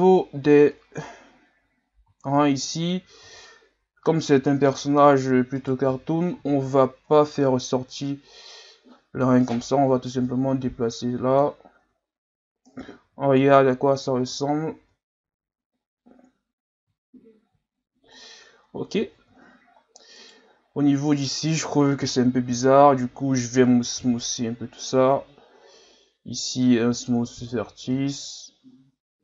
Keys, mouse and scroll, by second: 2.1 scroll up 2, 3.3 z, 5.6 right click, 5.8 c, 10.1-11.8 drag, 11.8 Tab, 13.0 z, 13.6 scroll down 3, 14.3 Tab, 14.8 Tab, 15.2 a, 16.1 scroll up 2, 17.1-18.2 scroll down 1, 18.2 scroll down 1, 18.6 scroll up 6, 19.1-19.5 scroll down 4, 19.8 scroll up 1, 20.1 Tab, 20.2 right click, 21.1 right click, 22.1 ctrl+KP_Add, 22.5 ctrl+KP_Add, 23.9 w, 27.8 Tab, 28.7 scroll down 3.